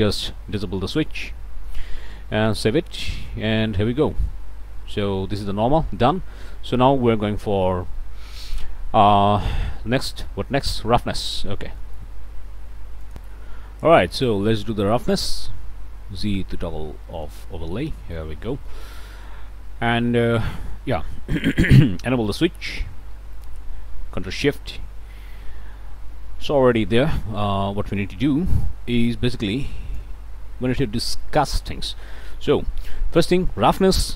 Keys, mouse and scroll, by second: 0.6 click, 0.9-2.8 middle drag, 2.5 ctrl+s, 3.0-3.3 ctrl+scroll up 1, 3.6 click, 10.0 click, 10.4-11.0 scroll down 2, 11.0 click, 11.3-11.7 scroll up 1, 11.7 click, 11.8 middle click, 13.1 click, 14.2 middle click, 14.8-15.1 scroll up 1, 15.1 click, 15.4 z, 16.6 scroll up 1, 16.8 click, 17.1 middle click, 17.4-17.7 scroll up 1, 17.9 middle click, 18.5 shift+middle click, 19.2 middle click, 22.3 middle click, 22.3 click, 23.3 ctrl+shift+click, 25.1 scroll up 2, 25.6 scroll down 2, 26.7 click, 27.5 scroll up 2, 29.0-30.2 middle drag, 30.3-30.7 scroll up 2, 31.2-32.6 middle drag, 32.9 scroll up 1, 33.8 middle click.